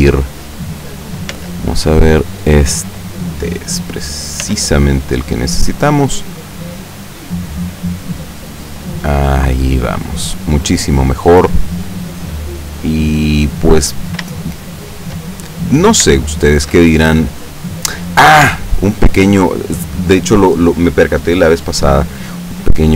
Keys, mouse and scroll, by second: 1.4 z, 2.4 right click, 4.5 z, 6.3-6.9 middle drag, 7.4-9.6 drag, 9.8 scroll down 2, 10.1-11.9 middle drag, 12.0 scroll down 2, 12.5-13.7 middle drag, 13.8-14.3 scroll down 2, 14.4 shift+middle click, 15.7-16.1 scroll up 2, 16.3-18.2 shift+middle drag, 18.2-18.6 scroll up 1, 18.6 shift+middle click.